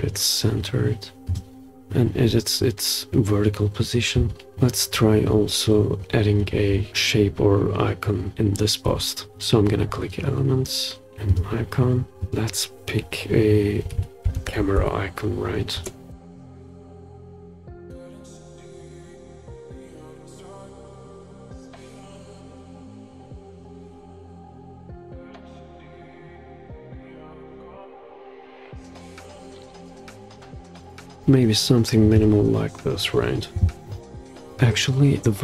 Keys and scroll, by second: 4.5 scroll down 1, 13.9-14.8 typing.